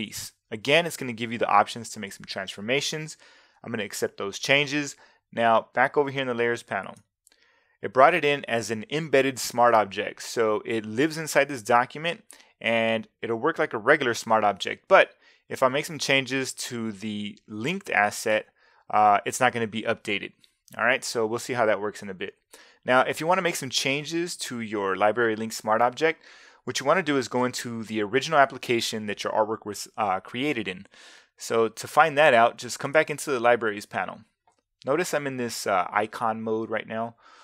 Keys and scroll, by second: 3.8 Return.